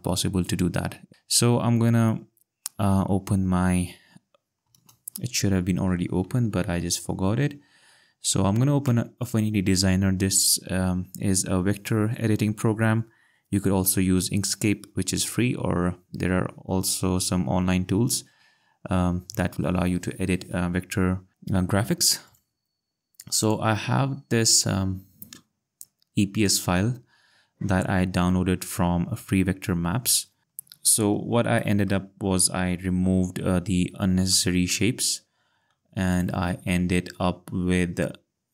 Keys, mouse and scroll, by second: 6.1 a, 6.7 f, 8.4 Down, 8.9 Return, 22.2 click, 26.4 click, 30.4-31.3 ctrl+scroll, 31.5 ctrl+scroll, 31.6 ctrl+click, 32.7 ctrl+scroll, 33.5-34.1 ctrl+scroll, 34.7 click, 36.1 click.